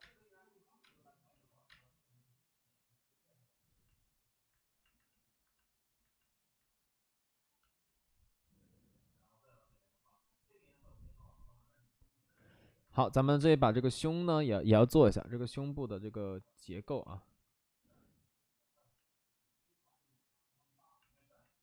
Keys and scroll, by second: 1.2 ctrl+z, 1.6 space, 6.0 space, 13.3 space, 14.7 space, 17.0 ctrl+z, 18.9 ctrl+z.